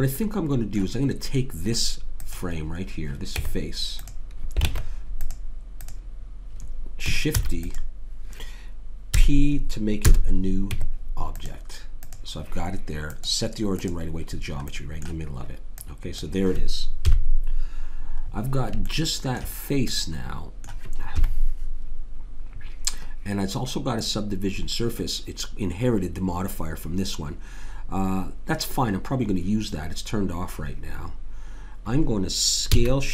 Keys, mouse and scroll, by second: 2.2 click, 3.3 Tab, 4.7 ctrl+Tab, 5.8-6.8 drag, 7.4 shift+d, 9.1 p, 10.7 Tab, 12.1-14.7 drag, 15.8 click, 17.1 KP_3, 21.1 KP_3, 32.7 s.